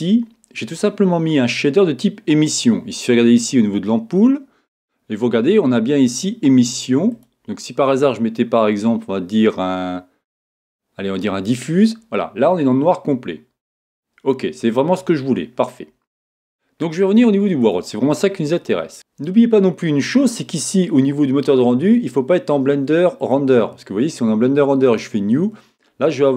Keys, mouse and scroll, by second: 7.1-9.0 drag, 17.6-18.9 drag, 21.5-23.4 drag, 24.8-26.3 drag.